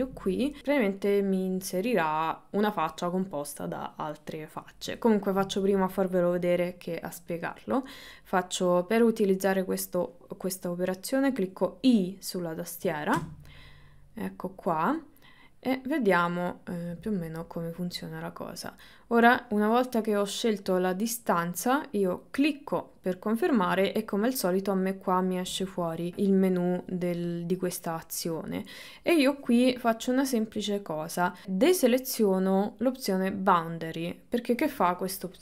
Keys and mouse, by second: 1.5 middle click, 5.2 middle click, 31.7 click.